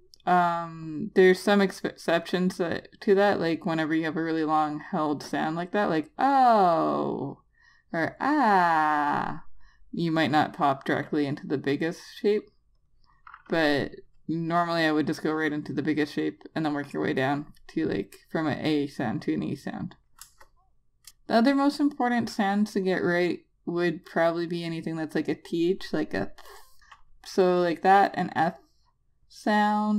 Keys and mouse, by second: 0.0 click, 2.5 double click, 13.1 click, 16.0 click, 20.6 Return, 21.8 click, 27.1 click.